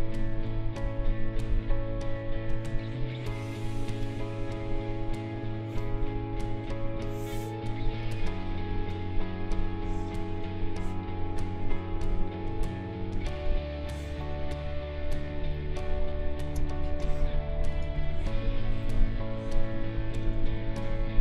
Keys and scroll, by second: 16.5 space.